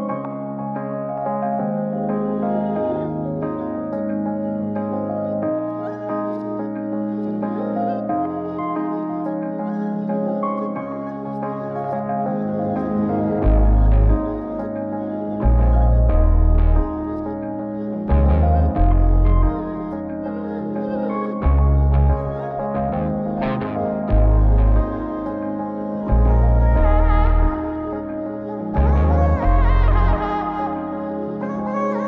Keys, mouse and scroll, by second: 0.3 click, 1.4 shift+a, 10.5-11.0 scroll up 2, 11.0 middle click, 11.7 shift+a, 17.2-17.9 drag, 18.7-20.6 drag, 21.3 click, 24.6 click, 25.3 click, 30.6-31.9 drag.